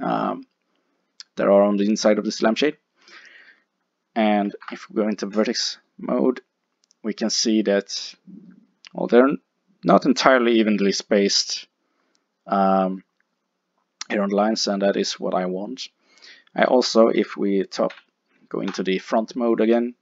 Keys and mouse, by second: 0.4-3.5 middle drag, 4.5 ctrl+Tab, 5.7 middle click, 11.1-14.9 middle drag, 17.9 KP_1, 18.7 KP_5, 19.8 middle click.